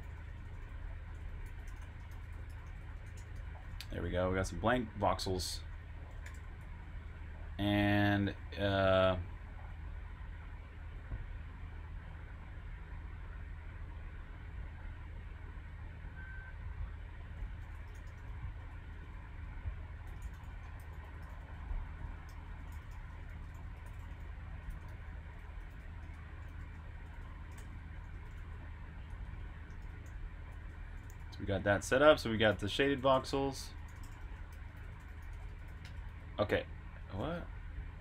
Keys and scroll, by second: 5.8 typing, 7.0-8.5 typing, 9.5-12.1 typing, 14.6-15.4 typing, 16.9-22.4 typing, 35.8-37.1 typing.